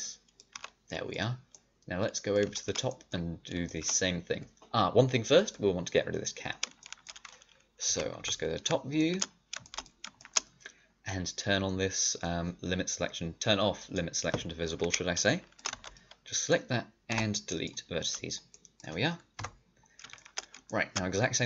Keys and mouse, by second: 0.5 a, 5.3-7.8 middle drag, 7.8 KP_7, 8.1 KP_5, 13.7-15.2 drag, 15.2 middle click, 15.6 d, 17.0 Delete, 18.3 middle click, 19.3 KP_5.